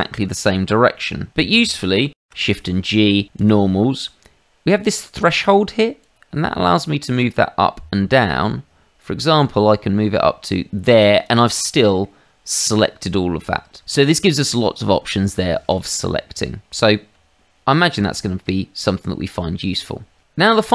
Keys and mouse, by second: 2.1 shift+g, 3.3 click, 6.0 click, 12.0 middle click, 16.4 middle click, 17.1 Tab, 18.1 shift+middle click, 18.9 middle click, 20.5 shift+middle click.